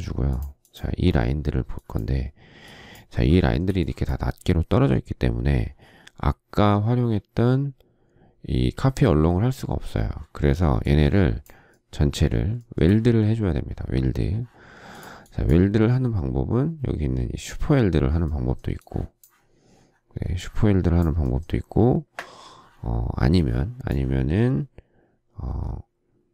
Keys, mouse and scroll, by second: 3.4 shift+middle click, 12.6 shift+middle click.